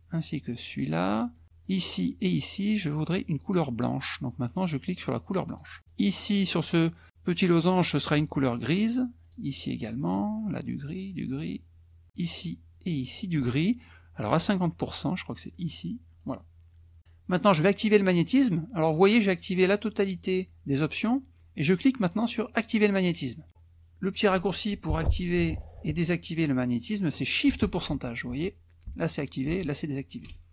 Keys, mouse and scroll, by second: 0.7 shift+click, 1.6 shift+click, 2.9 shift+click, 5.6 click, 5.9 click, 9.2 shift+click, 10.1 shift+click, 11.1 shift+click, 12.1 shift+click, 13.1 shift+click, 16.3 click, 17.8 click, 22.7 click.